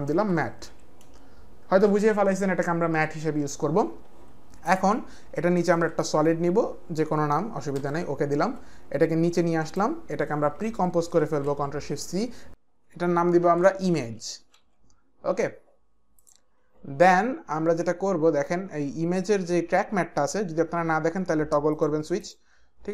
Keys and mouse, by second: 0.0-1.8 typing, 4.6 click, 5.6 ctrl+y, 7.7 Return, 9.4 click, 11.2 ctrl+shift+c, 12.5 click, 13.5-15.1 typing, 16.2 click, 17.4-18.1 typing, 17.6 click, 21.7 click, 22.2 click.